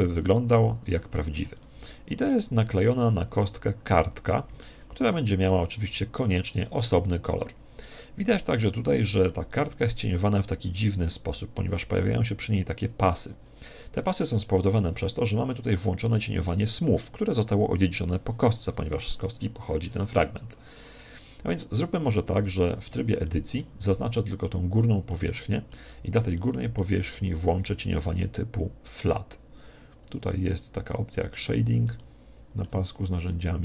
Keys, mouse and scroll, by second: 0.1 click, 0.5 Tab, 1.2-11.3 middle drag, 3.0 z, 15.3-18.1 middle drag, 21.7-24.9 middle drag, 22.7 Tab, 24.2 right click, 25.1-28.9 middle drag, 29.5-31.7 scroll down 1, 31.7 scroll down 1, 32.0-33.6 middle drag.